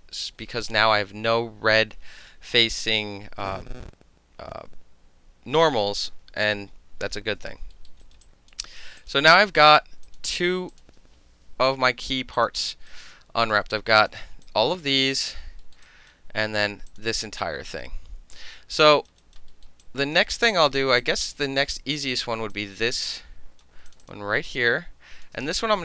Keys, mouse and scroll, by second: 0.1 alt+middle click, 0.4 alt+right click, 7.1-7.7 alt+middle drag, 7.9 alt+middle click, 8.0 alt+right click, 8.1 alt+middle click, 8.2 alt+click, 8.5 alt+middle click, 9.0 click, 9.1 middle click, 9.6 click, 10.0 click, 10.7 click, 11.5 shift+i, 12.3 click, 12.9 right click, 13.7-14.1 alt+drag, 14.4-15.2 drag, 15.7 alt+middle click, 15.8 alt+right click, 16.1-16.4 alt+middle drag, 16.5-16.9 alt+middle drag, 16.9 alt+click, 17.0 alt+middle click, 17.4-18.7 alt+drag, 18.7 alt+middle click, 18.9 alt+right click, 19.1 alt+middle click, 19.2 alt+right click, 19.3 alt+middle click, 19.6 alt+middle click, 19.8 alt+click, 20.1 alt+middle drag, 20.5 alt+middle click, 20.7 alt+right click, 20.8 alt+middle drag, 21.0-21.6 alt+right drag, 21.6-22.1 alt+middle drag, 22.1 alt+click, 22.2 alt+middle drag, 22.5 alt+click, 22.9 alt+middle drag, 23.1-23.6 right drag, 23.6 middle drag, 23.9 click, 23.9 middle click, 24.0 click, 24.1-24.5 alt+middle drag, 24.5-25.2 alt+drag, 25.2-25.8 alt+middle drag, 25.4 space.